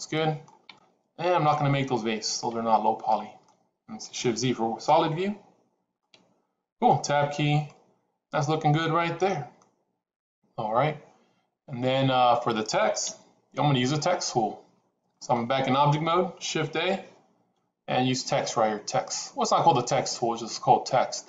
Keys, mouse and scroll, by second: 3.0 middle click, 5.4 shift+z, 5.9 middle click, 6.9 Tab, 7.6-9.4 middle drag, 12.9 KP_1, 16.7 shift+a.